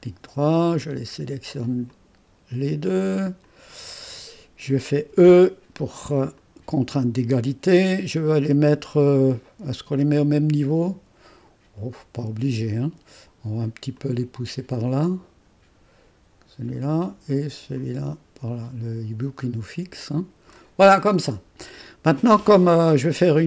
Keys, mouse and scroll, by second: 0.7 click, 1.9 click, 3.7 click, 5.1 e, 6.3-8.5 drag, 8.5 click, 13.9-17.4 drag, 17.8-21.2 drag.